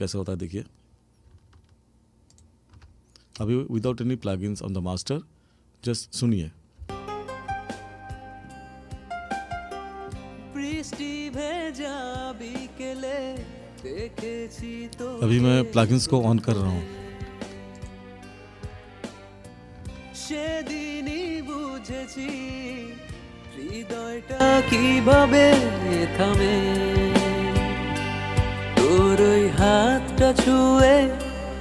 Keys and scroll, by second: 6.8 space.